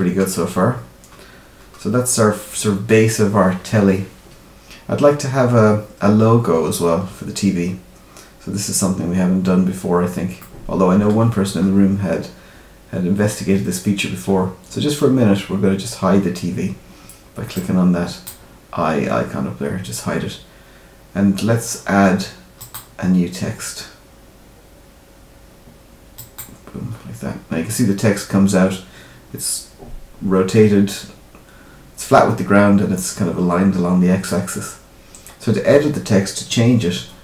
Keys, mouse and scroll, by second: 0.2 scroll up 1, 0.3-1.4 scroll down 3, 1.6 scroll up 1, 5.0-7.7 scroll up 1, 9.3-10.3 scroll down 1, 10.3 middle click, 17.5 click, 20.0 scroll up 1, 22.5 click, 27.8-28.1 scroll down 2, 34.6-37.2 scroll up 1.